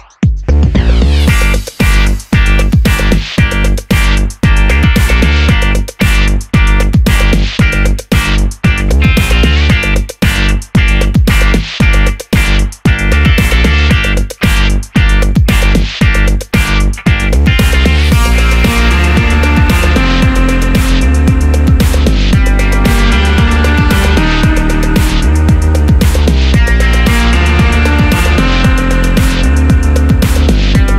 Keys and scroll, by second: 10.3 super+d.